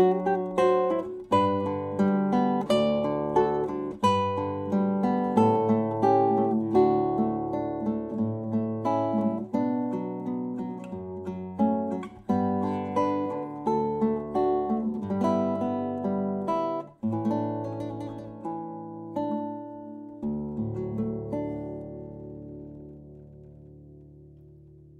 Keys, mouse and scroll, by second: 3.9 Tab, 7.8-10.5 right drag, 8.7-11.0 drag, 11.0 KP_1, 19.1-21.2 drag, 21.1 KP_5, 22.2-24.9 middle drag, 24.3 Tab.